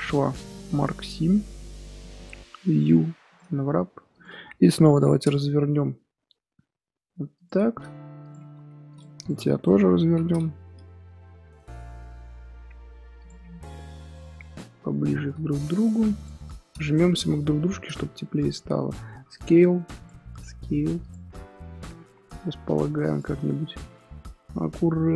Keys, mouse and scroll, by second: 0.0 middle click, 0.5-1.8 right drag, 1.8 a, 1.9-3.4 middle drag, 3.4 u, 4.2 click, 4.9 l, 7.8 r, 8.5 g, 9.2 click, 9.6 click, 10.0 l.